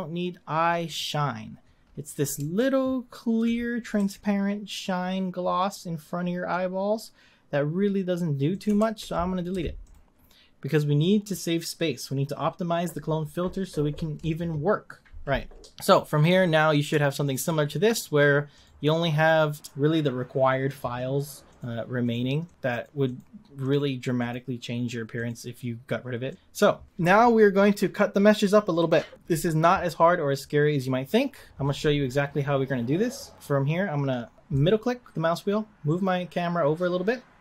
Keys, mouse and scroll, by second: 0.8 click, 1.8-2.6 scroll up 5, 2.6-4.0 shift+middle drag, 4.0 g, 8.8 ctrl+z, 9.5 x, 16.4 click, 17.2 shift+click, 17.9 click, 18.6 click, 19.1 click, 21.5 click, 22.0 click, 22.4 drag, 22.7 click, 23.0 click, 23.6 click, 24.1 click, 25.1 click, 26.3 click, 26.4 scroll down 2, 26.9 click, 34.5-37.4 middle drag.